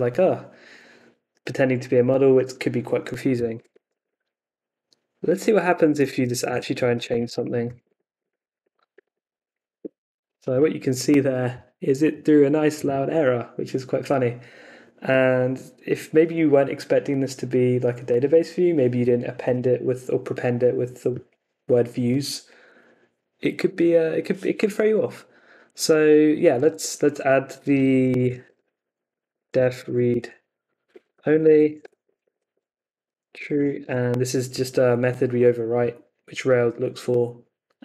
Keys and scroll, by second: 2.9 Up, 3.3 BackSpace, 5.3-9.2 typing, 8.6 Left, 9.8 Return, 25.8 super+Tab, 27.7 Escape, 28.2-33.8 typing, 28.4 Escape.